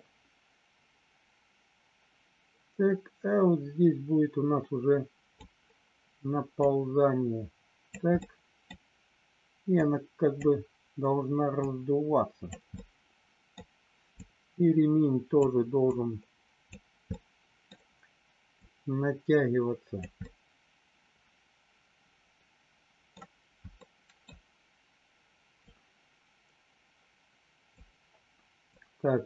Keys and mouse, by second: 6.7-7.9 drag, 8.2 middle click, 9.8 click, 11.5 click, 12.7 middle click, 14.2-15.4 drag, 15.8 click, 17.1 middle click, 18.5-20.1 drag, 20.2-23.1 middle drag, 23.8 middle click, 25.7-27.7 drag, 28.7 click.